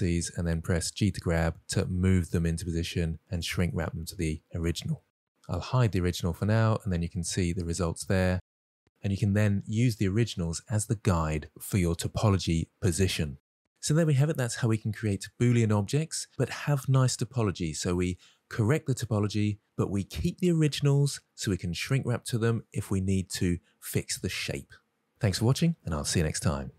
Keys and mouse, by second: 0.4 1, 0.7 click, 1.0 middle click, 2.0 g, 4.4 click, 4.6 middle click, 7.1 click, 7.5 Tab, 8.2-10.1 middle drag, 14.5-17.5 middle drag.